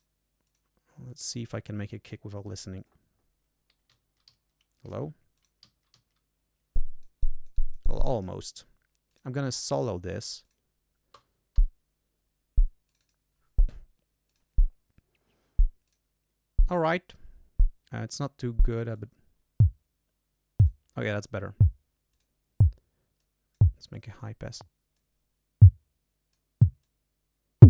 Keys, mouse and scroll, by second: 0.4 click, 1.0 click, 3.8 y, 5.3 click, 5.5 y, 6.7-8.2 drag, 9.0 click, 9.9 click, 10.4 click, 11.5 l, 12.8 click, 14.2 click, 15.8 click, 16.6 click, 18.9-20.8 drag, 22.0 click, 23.1 click, 23.9 click, 24.9-26.5 drag, 26.7-27.6 drag.